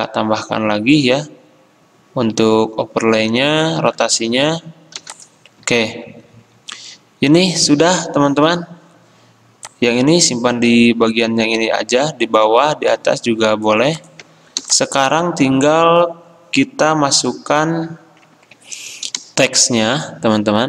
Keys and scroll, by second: 5.0 v, 18.5 ctrl+z, 18.5 ctrl+c, 18.6 F10.